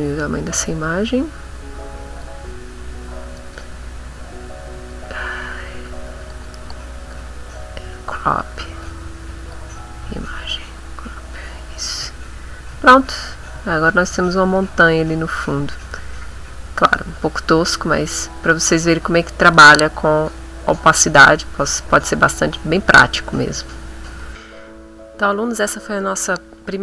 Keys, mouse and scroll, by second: 1.3 click, 3.0 click, 4.2 click, 5.8 click, 7.1-8.8 drag, 8.8 click, 10.4 click, 11.7-12.8 middle drag, 12.9 ctrl+middle click, 13.5 ctrl+middle click, 14.3 ctrl+middle click, 16.9 click, 17.5 middle click, 18.2 middle click.